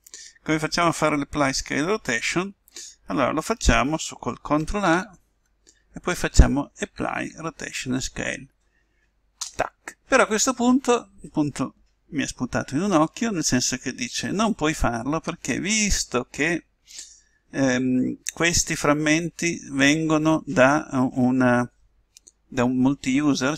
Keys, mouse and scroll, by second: 4.9 ctrl+a, 7.1 Down.